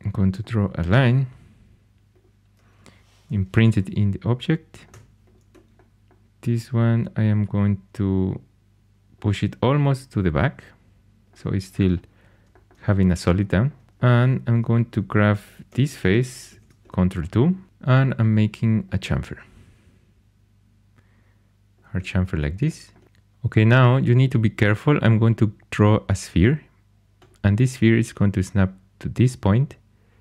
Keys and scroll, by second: 3.2 Caps_Lock, 4.7-5.4 typing, 14.2 2, 15.6 3, 16.5 ctrl+2.